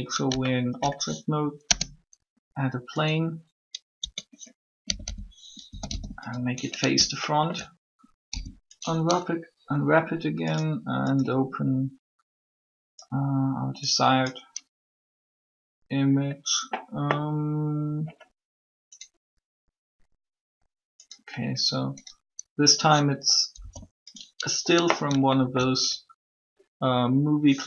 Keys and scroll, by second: 1.6 shift+space, 3.9 Tab, 4.6-6.1 typing, 8.0 alt+u, 23.3 u.